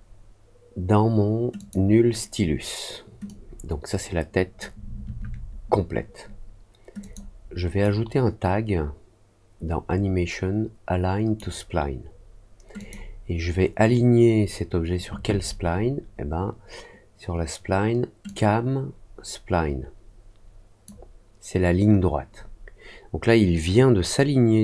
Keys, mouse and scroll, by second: 1.5 click, 3.2-4.5 drag, 6.9 click, 7.8-11.3 right drag, 12.7 click, 18.2-20.8 drag.